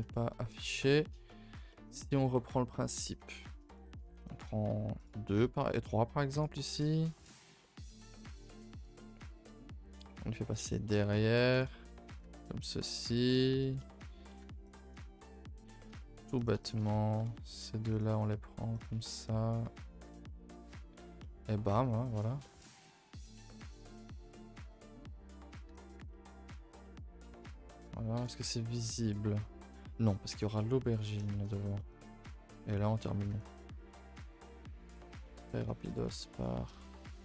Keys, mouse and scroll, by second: 0.1-3.6 middle drag, 3.6 click, 4.2 shift+click, 4.9 shift+click, 5.2-6.6 middle drag, 6.6 e, 7.6-10.0 middle drag, 10.0 g, 10.8 middle click, 11.5 s, 12.2 g, 12.8-14.3 middle drag, 14.3 1, 14.6 click, 15.1-16.3 middle drag, 16.3 click, 16.6 shift+click, 16.8 middle click, 17.2 s, 18.9 a, 19.0 a, 19.8 click, 20.0 Tab, 20.2 middle click, 20.9 Tab, 21.2 middle click, 21.4-22.1 scroll up 2, 22.1 click, 22.4 middle click, 22.7 ctrl+r, 23.4 middle click, 24.1 g, 25.7 click, 25.9 Tab, 26.1-26.4 middle drag, 26.4 a, 26.6 a, 26.7 scroll down 4, 26.8-28.1 middle drag, 28.1 KP_0, 30.3 Tab, 30.6-31.0 middle drag, 31.0-31.5 scroll up 7, 31.3 shift+middle click, 31.5 Tab, 31.7 middle click, 32.2 scroll up 1, 32.5-33.3 shift+middle drag, 33.3 Tab, 33.5 middle click, 34.0 scroll up 2, 34.1 a, 34.3 a, 34.9 click, 35.2 middle click, 35.4 a, 35.6 a, 35.8 2, 35.9 click, 36.3 click, 36.8 shift+click, 37.1 shift+click.